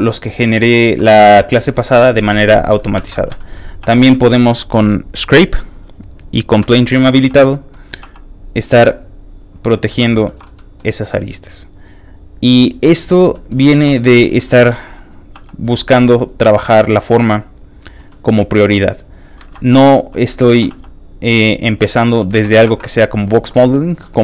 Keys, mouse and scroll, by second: 0.0 middle click, 0.3 shift+click, 0.6 shift+middle click, 0.9 middle click, 1.4 shift+middle click, 1.7 shift+middle click, 2.6 ctrl+shift+middle click, 3.0 ctrl+Tab, 3.4 shift+middle click, 4.0 ctrl+shift+f, 4.0 click, 4.2 shift+middle click, 5.4 click, 5.4 middle click, 5.7 click, 6.8 shift+middle click, 7.2 shift+f, 7.3 click, 7.5 middle click, 8.0 f, 8.1 click, 8.6 click, 9.9 ctrl+z, 10.2 ctrl+shift+middle click, 10.4 shift+middle click, 10.5 scroll up 2, 11.2-12.9 shift+drag, 13.3 middle click, 13.5 scroll down 2, 13.7 shift+middle click, 13.9 shift+middle click, 14.3 shift+middle click, 14.5 shift+middle click, 15.3 shift+f, 15.4 click, 15.7 middle click, 16.0 shift+middle click, 16.1 shift+middle click, 16.3 scroll up 3, 16.7 f, 16.8 click, 17.2 click, 17.7 click, 18.1 middle click, 18.6 click, 18.9 click, 19.4 ctrl+z, 19.7 click, 19.7 f, 20.2 middle click, 20.5 ctrl+z, 20.7 f, 20.9 click, 21.2 click, 22.0 middle click, 22.3 ctrl+z, 22.8 ctrl+Tab, 22.8 middle click, 22.8 scroll down 1, 23.0 middle click, 23.3 shift+middle click, 23.8 click, 24.0 shift+middle click.